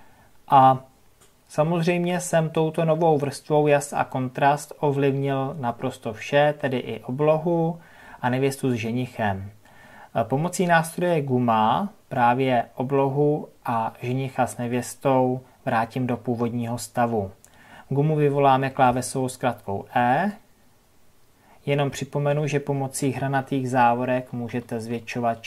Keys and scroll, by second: 18.8 e.